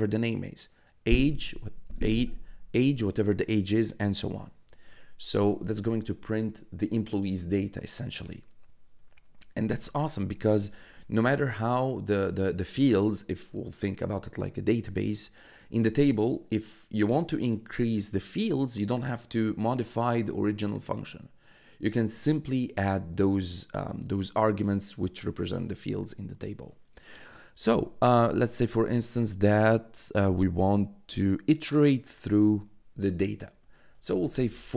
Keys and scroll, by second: 9.6 Return, 10.2 Tab, 33.5-34.7 typing.